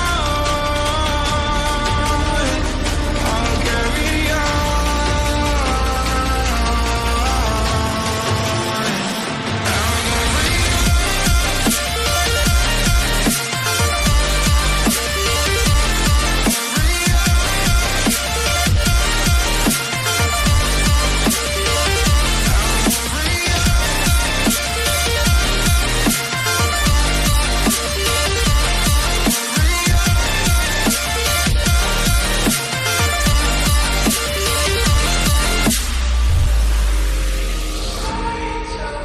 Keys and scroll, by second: 7.1 ctrl+i, 36.5 ctrl+i, 36.5 [, 36.9 [.